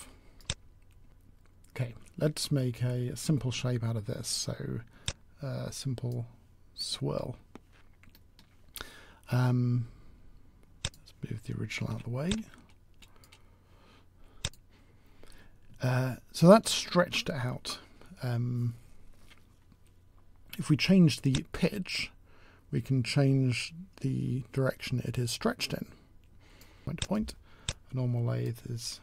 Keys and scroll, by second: 1.0 ctrl+z, 1.0 w, 11.7 w.